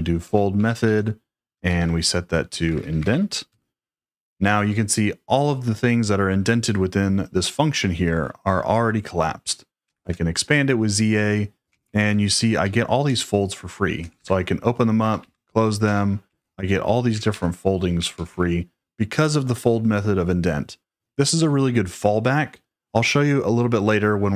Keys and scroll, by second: 0.0-3.6 typing, 9.6-18.5 typing.